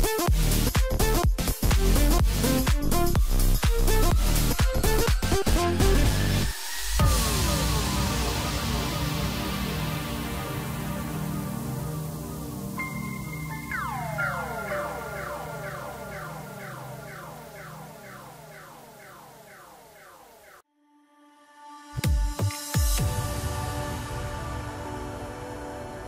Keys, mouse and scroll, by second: 0.6-2.3 middle drag, 2.3-2.8 scroll down 4, 2.8-3.8 middle drag, 3.8-4.5 scroll down 2, 4.5 KP_1, 5.8 click, 6.4 click, 7.1-7.9 scroll up 2, 7.9 g, 9.2-9.9 scroll down 2, 9.9 g, 13.5 KP_Decimal, 14.3 middle click, 15.0 scroll up 1, 15.3-16.2 middle drag, 16.2-16.9 scroll up 3, 16.9 scroll up 1, 17.1 g, 20.2 Tab, 20.5 scroll down 3, 20.8-23.1 middle drag, 23.1 a, 24.0 3, 24.5-25.5 scroll up 1, 25.5 e.